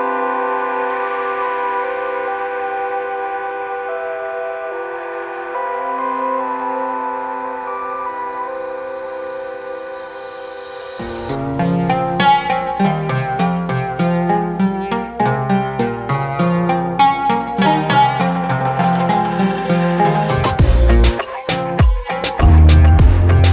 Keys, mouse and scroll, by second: 1.0 click, 3.3-3.6 scroll down 3, 3.8 alt+click, 4.3-4.6 scroll down 2, 4.7 alt+click, 5.0 scroll up 1, 6.0 scroll up 1, 6.6 scroll down 2, 7.9-9.4 drag, 9.6 scroll down 1, 9.6 scroll up 1, 10.2-13.6 drag, 14.3-16.7 drag, 17.4-21.4 drag, 21.6 alt+click, 22.0 middle click, 22.1 scroll up 1, 22.3 alt+click, 23.0 scroll down 2.